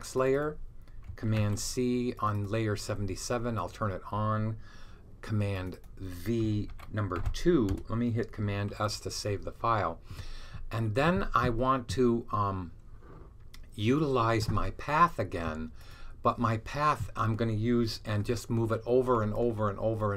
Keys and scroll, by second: 1.2 super+c, 6.6 super+v, 7.1 super+v, 8.6 s.